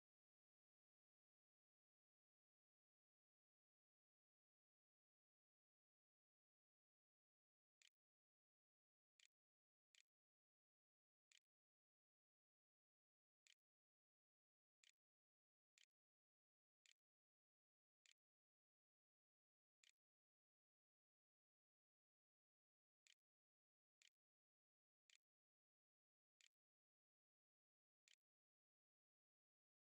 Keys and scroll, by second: 4.1-5.6 typing, 6.8-12.2 typing, 13.3-26.4 typing, 27.4-29.8 typing, 27.6 Tab.